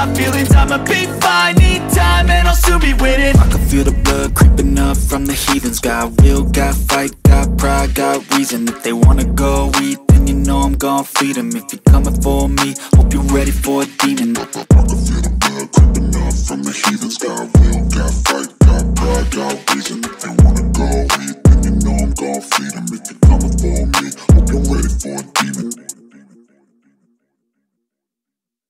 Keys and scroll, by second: 5.4 ctrl+z, 11.0 Escape, 20.0 space, 20.4 F3, 22.2 shift+F2, 23.0 F9, 26.6 F3.